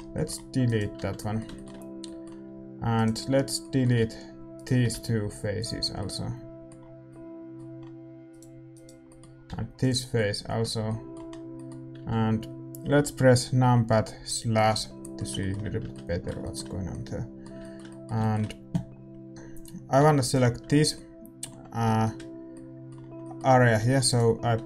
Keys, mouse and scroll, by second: 0.9 Tab, 2.9-11.9 right drag, 5.6 x, 5.9-13.6 middle drag, 9.8 x, 11.9 Tab, 13.6 KP_Divide, 15.8 Tab, 19.5-21.8 drag, 20.2-23.6 right drag, 23.6 a, 24.0-24.6 right drag.